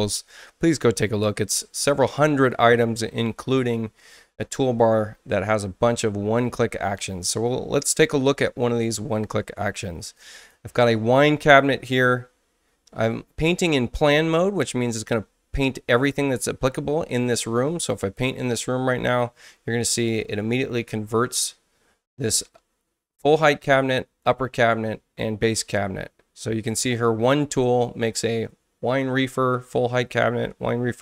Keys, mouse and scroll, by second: 10.3 click, 18.0 click, 26.0 space.